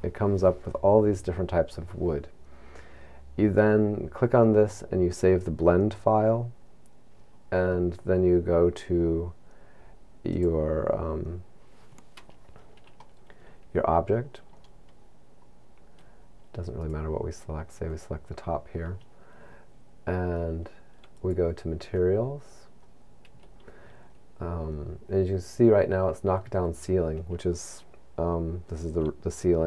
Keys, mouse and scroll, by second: 13.6 middle click, 17.4 right click, 21.3 click.